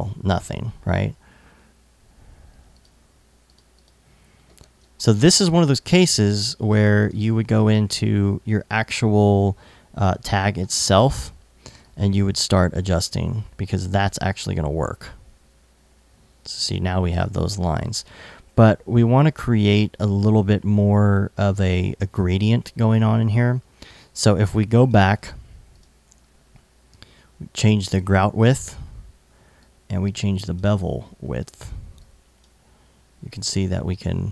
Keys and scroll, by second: 4.3 super+z.